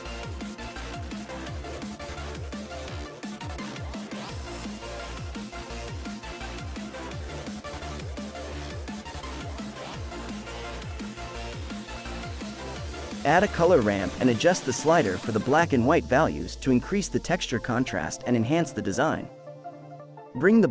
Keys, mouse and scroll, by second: 2.8-3.3 middle drag, 3.3-4.1 scroll down 2, 4.1 drag, 5.1 click, 5.9 click, 6.5 shift+a, 14.4-15.5 scroll up 6, 15.5-16.9 middle drag, 16.9-20.0 drag, 20.3-20.7 drag.